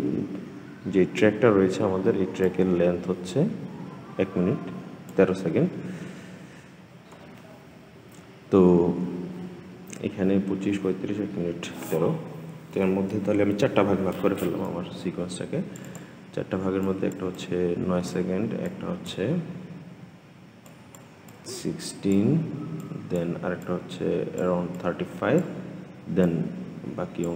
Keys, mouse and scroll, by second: 0.3-2.2 scroll down 3, 2.2-5.2 drag, 14.4-27.3 drag.